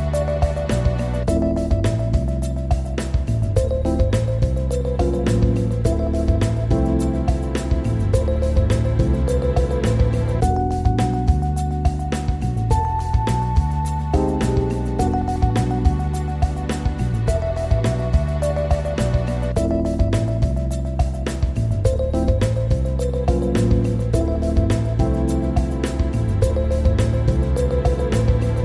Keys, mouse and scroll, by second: 2.1 click, 3.7-6.9 scroll down 9, 6.9-7.7 scroll down 2, 7.7-10.7 shift+middle drag, 11.3 s, 12.0 click, 13.7-16.7 drag, 21.8 click.